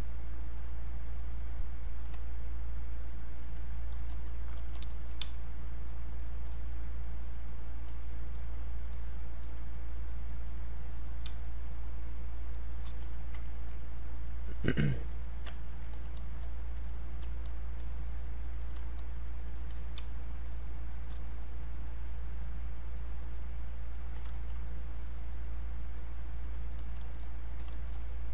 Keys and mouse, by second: 0.2-4.3 drag, 4.3 click, 5.2 space, 7.1 click, 8.9 space, 9.3-11.3 drag, 11.3 space, 11.6 click, 11.7 space, 13.0 click, 13.4 ctrl+right click, 14.1 click, 15.5 ctrl+right click, 15.9 click, 16.8 click, 17.8 click, 19.7 alt+click, 20.0 space, 20.5 click, 20.7 space, 21.7 click, 25.0 click, 27.6 click.